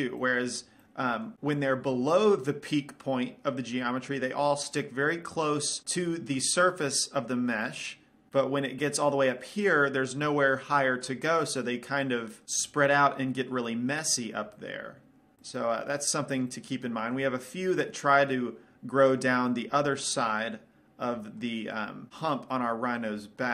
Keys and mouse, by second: 0.6-1.9 middle drag, 2.3-7.9 middle drag, 8.1-15.3 middle drag, 15.6-18.6 middle drag.